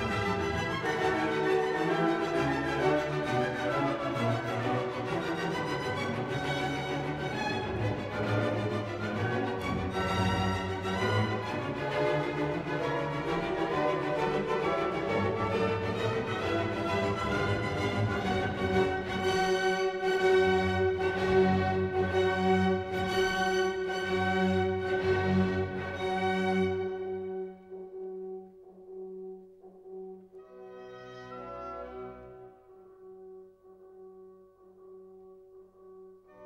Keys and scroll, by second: 0.9 ctrl+a, 2.9 ctrl+d, 9.6 ctrl+t, 12.1 Return, 14.6 ctrl+z, 17.3 ctrl+a, 19.8 ctrl+d, 26.9 ctrl+-, 29.5 ctrl+-, 35.2 ctrl+t.